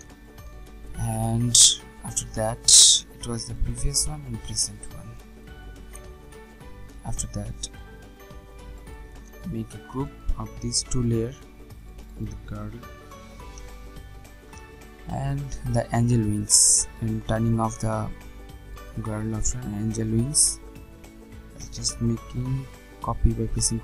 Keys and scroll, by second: 10.8 ctrl+g, 14.1 Return, 22.4 ctrl+j.